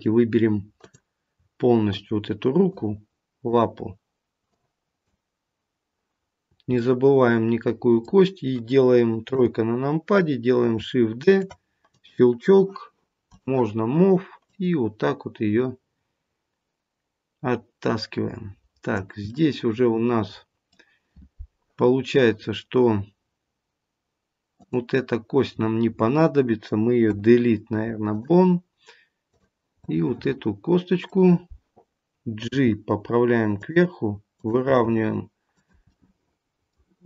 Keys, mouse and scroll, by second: 0.7 click, 1.9 shift+click, 6.7 middle click, 7.3 middle click, 9.2 KP_3, 11.2 shift+d, 13.2 click, 14.4 click, 19.3 middle click, 24.4 click, 27.0 Delete, 29.2 click, 29.8 middle click, 32.4 g, 34.2 click, 34.8 g, 35.8 middle click.